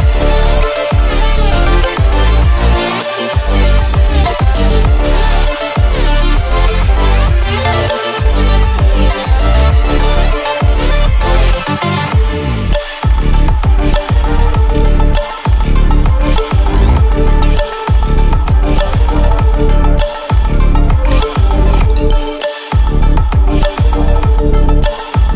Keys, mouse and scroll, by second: 0.0 shift+click, 0.6 shift+i, 0.7 shift+click, 1.3 shift+v, 1.4 shift+click, 2.3 shift+click, 2.5 alt+shift+scroll down 1, 2.7 alt+shift+scroll up 1, 2.9 shift+click, 6.9 click, 17.1 alt+scroll down 1, 17.9-18.2 ctrl+scroll down 1, 18.9 click, 19.6 ctrl+z, 19.9-21.7 drag, 21.8 click, 22.6 v, 22.9 click, 23.7-24.2 alt+scroll up 1, 24.5 alt+scroll up 1, 24.5 shift+click.